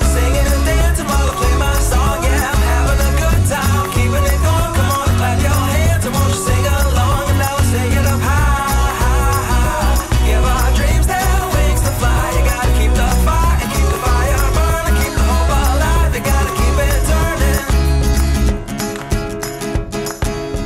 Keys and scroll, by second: 1.1 shift+super+v, 4.2 shift+super+v, 5.0 shift+super+v, 5.6 alt+shift+super+v, 6.7 alt+shift+super+v, 8.9 -, 10.4 ○, 13.4 r, 19.0 shift+super+a.